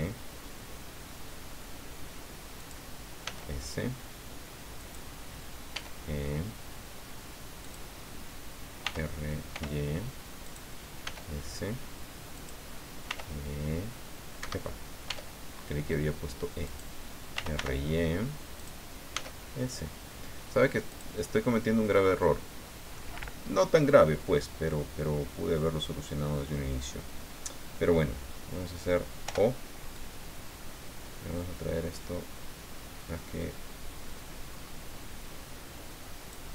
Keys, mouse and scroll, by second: 2.6 click, 3.2 s, 4.8 click, 5.7 e, 7.6 click, 8.9 r, 9.5 y, 10.4 click, 11.0 s, 12.3 click, 13.1 r, 14.4 Escape, 15.0 e, 16.7 click, 17.1-18.1 typing, 18.6 click, 19.1 s, 20.9-23.1 drag, 29.3 o, 30.0 click, 30.7-31.0 scroll down 2, 31.5-31.8 scroll down 2, 32.5-32.8 scroll down 2, 33.4 scroll up 2, 34.5-34.8 scroll up 2.